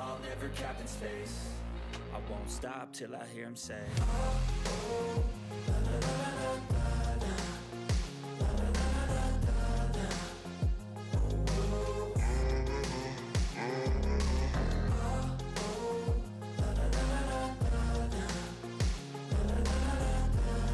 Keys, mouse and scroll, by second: 0.0-1.0 typing, 2.4 click, 3.6-4.6 typing, 5.7 typing, 7.2 click, 10.4 click, 11.0-11.8 typing, 13.0-14.5 typing, 16.3-19.8 typing.